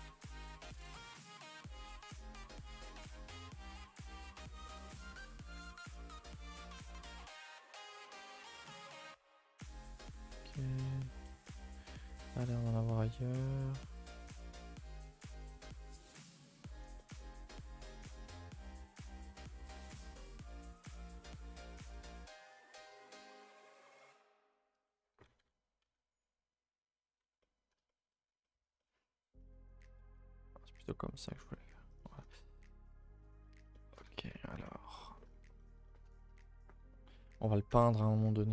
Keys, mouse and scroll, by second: 0.3 click, 0.3 g, 1.3 click, 1.3 g, 3.1 click, 3.8 g, 5.4 click, 5.4 g, 5.8 scroll down 2, 6.0 middle click, 6.4 scroll up 2, 6.6 middle click, 7.1 scroll down 1, 7.3-9.4 middle drag, 9.4 click, 10.1-12.2 shift+middle drag, 12.5 middle click, 13.5-14.7 middle drag, 16.0 middle click, 16.7 scroll down 2, 16.9-19.1 middle drag, 19.1 click, 19.4 Tab, 19.6 middle drag, 19.7 a, 19.9 a, 20.3-20.9 middle drag, 20.9 scroll up 2, 21.1 middle click, 21.4 scroll up 1, 21.7 Tab, 21.9-23.5 middle drag, 23.5 click, 23.8 shift+click, 24.1 shift+click, 25.1 s, 27.4 middle click, 28.1 scroll up 1, 28.4-29.9 middle drag, 29.9 s, 32.1 scroll down 2, 32.3 a, 32.4 a, 32.5 middle click, 32.7-33.4 scroll down 3, 33.0 shift+middle click, 33.4 middle click, 33.9 scroll up 2, 34.0 a, 34.2 a, 34.3 middle click, 34.5 scroll down 1, 34.6 2, 34.9 middle click, 35.2-35.5 scroll up 2, 35.5 middle click, 36.0 scroll up 2, 36.2 a, 36.4 a, 36.8 scroll up 3, 36.9-37.9 scroll down 4, 37.9-38.5 scroll up 2.